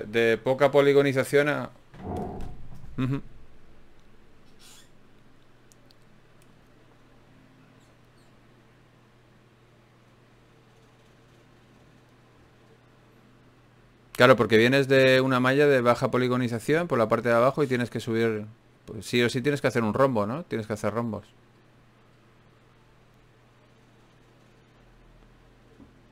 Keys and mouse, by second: 0.5 a, 0.7 a, 1.5 z, 3.1 Tab, 7.7 KP_Divide, 8.7 Tab, 11.9-13.1 drag, 13.1 ctrl+shift+b, 16.5 g, 17.1-18.3 drag, 17.8 right click, 18.3 g, 24.6-26.1 drag.